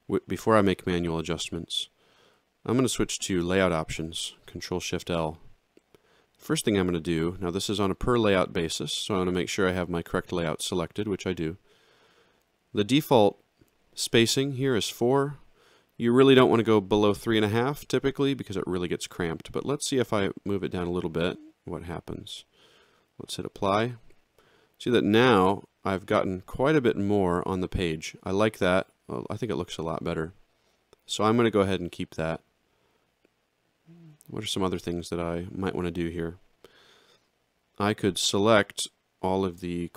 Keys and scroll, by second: 4.0 ctrl+shift+l.